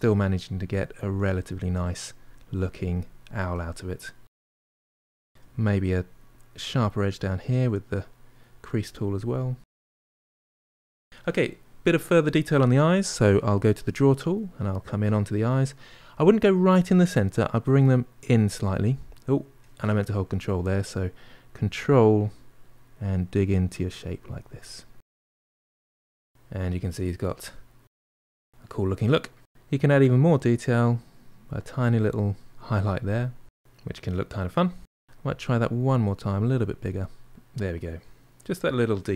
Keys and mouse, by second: 3.4-4.5 ctrl+middle drag, 4.5 shift+click, 5.2-6.2 middle drag, 6.2-7.6 ctrl+drag, 7.6 middle click, 8.4-10.4 ctrl+drag, 10.4-13.0 middle drag, 13.6 click, 14.2-17.2 ctrl+middle drag, 17.7-20.1 drag, 20.1 ctrl+z, 20.9-23.8 ctrl+drag, 25.4 ctrl+click, 26.0-27.7 ctrl+middle drag, 28.1-30.0 ctrl+middle drag, 30.0-32.0 drag, 32.5-34.8 ctrl+middle drag, 34.8 ctrl+z, 34.9 ctrl+middle click, 35.6-36.6 drag, 36.8-39.1 ctrl+middle drag.